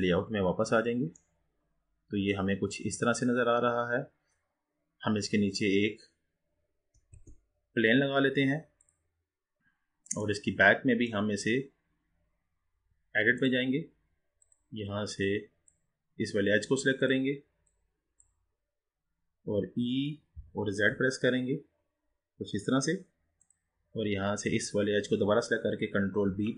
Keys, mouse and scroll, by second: 0.0 click, 1.2-5.5 middle drag, 5.5 click, 6.0-7.1 scroll down 4, 7.1 shift+a, 9.6 click, 9.6-10.4 scroll down 2, 10.4-11.7 middle drag, 11.7-12.4 scroll down 2, 12.4-13.6 scroll up 3, 13.6-15.4 drag, 17.0 click, 20.4 e, 24.5 click, 26.3 ctrl+b.